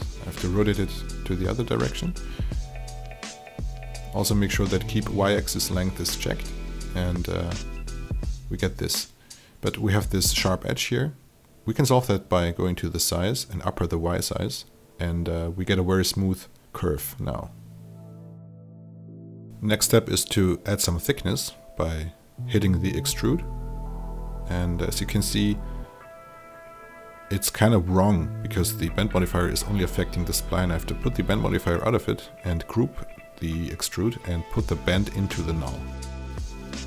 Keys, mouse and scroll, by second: 3.3-6.2 drag, 6.6 alt+right click, 7.1 alt+click, 8.4 alt+click, 9.0-16.8 drag, 17.0-18.9 alt+drag, 19.2-21.3 alt+drag, 22.4 alt+click, 23.9 click, 27.2 KP_0, 29.2 click, 32.4 alt+g, 33.4-36.8 drag.